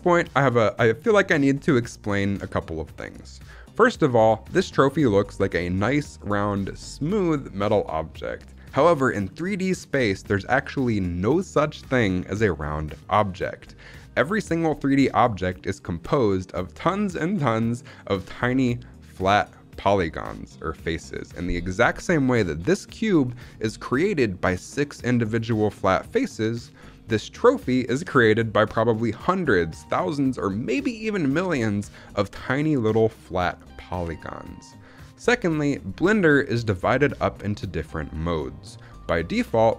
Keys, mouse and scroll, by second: 21.7-22.3 scroll up 1, 22.3-23.2 scroll up 3, 23.2-23.8 middle drag, 25.1-25.7 middle drag, 25.8-27.4 middle drag, 35.2 middle click, 35.7-37.4 scroll down 2, 37.4-38.3 scroll down 1, 38.6-39.4 scroll down 3, 39.4 middle click.